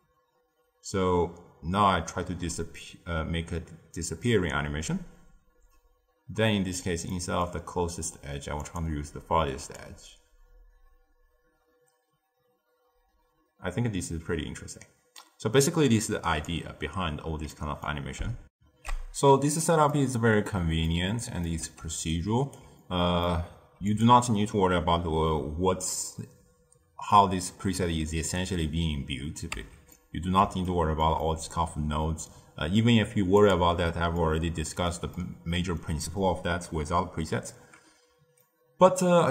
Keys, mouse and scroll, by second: 7.0-8.5 middle drag, 8.5 click, 9.7-12.7 drag, 17.4-18.4 middle drag, 18.4 ctrl+alt+shift+w, 19.8-21.7 middle drag, 21.7 d, 22.0 right click, 22.5 d, 22.7-23.8 middle drag, 23.8 click, 29.5 Tab, 29.8-33.3 middle drag, 33.3-34.1 drag, 34.1-38.1 ctrl+middle drag, 38.3-39.3 middle drag.